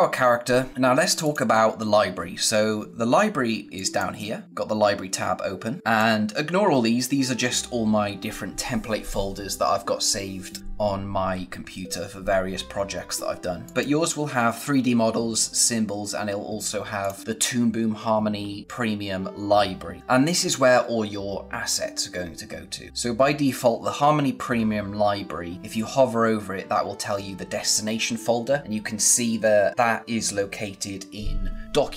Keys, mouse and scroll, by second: 1.1 click, 3.7 click, 5.8 click, 11.1 scroll up 1, 12.1-12.9 scroll down 1, 13.5 click, 16.9 click, 20.0 click.